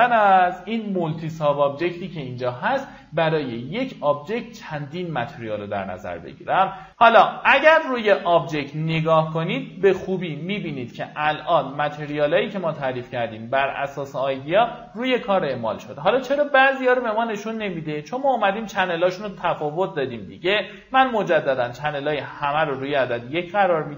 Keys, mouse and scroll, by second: 0.0-0.7 typing, 5.1 click, 7.1 click, 8.9 middle click, 9.0-9.7 scroll down 1, 9.9 alt+middle click, 10.5 middle click, 10.7 scroll up 1, 11.0 alt+middle click, 11.8 scroll up 1, 12.1 alt+middle click, 13.7 middle click, 14.2 alt+middle click, 18.9 click, 19.6 middle click, 20.5 click, 22.1 right click, 23.1 click.